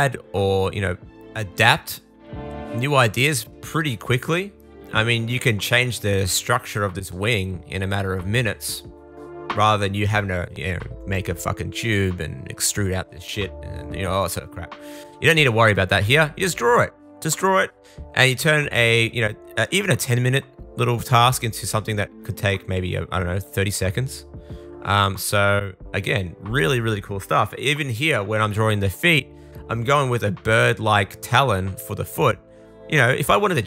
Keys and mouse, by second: 0.4 super+z, 0.7-3.2 super+drag, 3.2 super+z, 4.3 super+z, 4.6 super+z, 10.6 super+z, 10.8 super+z, 11.0 super+z, 11.2 super+z, 12.2 super+z, 12.7 shift+super+click, 13.2-15.0 shift+drag, 14.4 super+s, 15.0 middle click, 15.9 click, 16.5 shift+super+middle click, 16.9 super+click, 17.1 super+middle click, 17.5-22.7 drag, 17.7 super+z, 23.6 super+z, 24.5 shift+super+click, 24.9 super+z, 25.1 super+z, 25.7 super+z, 26.4 super+z, 26.9 super+z, 27.3 super+z, 29.4 super+z, 29.5 super+z, 30.7-33.6 shift+drag.